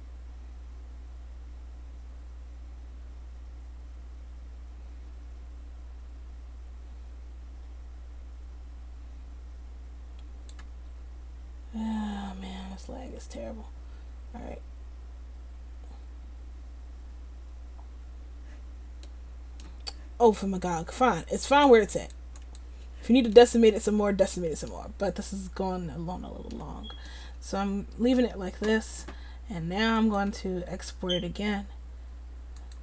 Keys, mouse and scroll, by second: 23.7 middle click, 29.7 middle click.